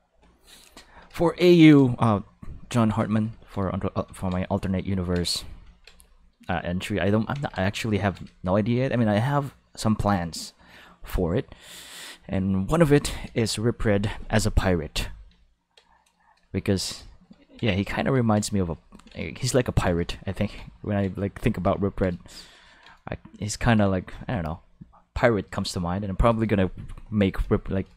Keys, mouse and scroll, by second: 7.3 ctrl+s, 21.3 shift+middle click, 22.1 shift+middle click, 23.1 shift+middle click, 23.6 ctrl+middle click.